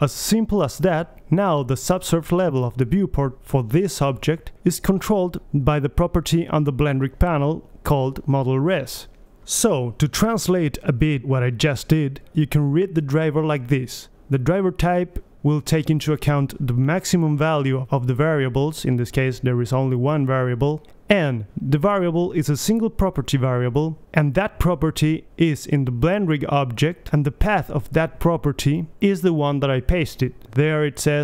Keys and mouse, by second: 2.8-4.2 middle drag, 4.2 click, 4.8 right drag, 5.1 middle drag, 5.3 middle click, 5.8 drag, 6.0-6.5 middle drag, 6.5-10.3 drag, 10.3-12.0 middle drag, 13.2-14.2 drag, 14.2-16.4 middle drag.